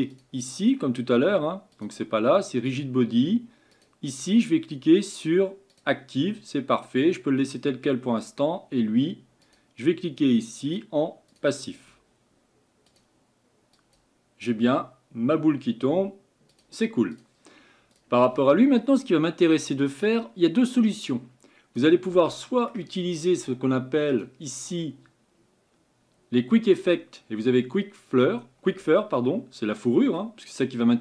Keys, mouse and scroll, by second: 0.1-8.3 drag, 9.5-18.7 drag, 20.1-22.2 drag, 22.2-24.1 middle drag, 24.1-31.0 drag.